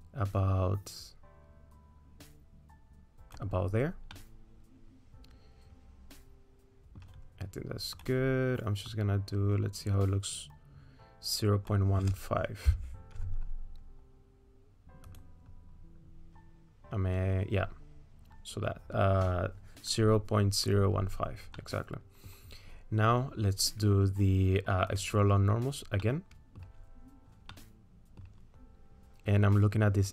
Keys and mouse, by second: 4.1 middle click, 5.3-7.0 middle drag, 8.4-15.2 drag, 21.6 click, 21.6 middle click, 21.6 right click, 25.0 click, 26.0 middle click, 27.5 middle click.